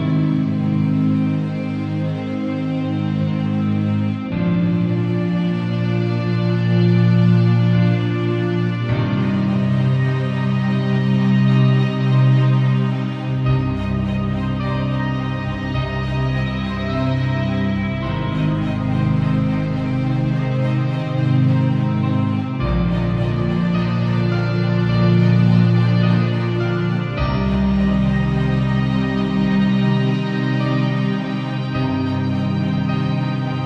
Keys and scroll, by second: 0.7 b, 5.5 [, 6.9 ], 11.4 [, 16.4 ].